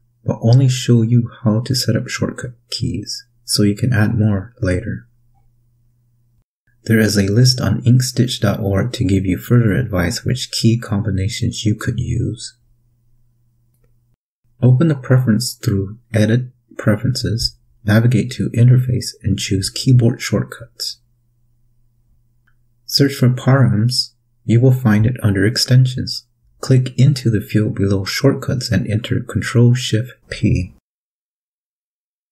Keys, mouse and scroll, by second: 14.8 click, 16.3 click, 19.4 click, 20.1-21.3 scroll down 1, 21.3 click, 22.4 click, 23.0-24.7 typing, 26.3 click, 27.0-27.5 scroll down 2, 29.2 click, 29.8 click, 30.8 ctrl+shift+p.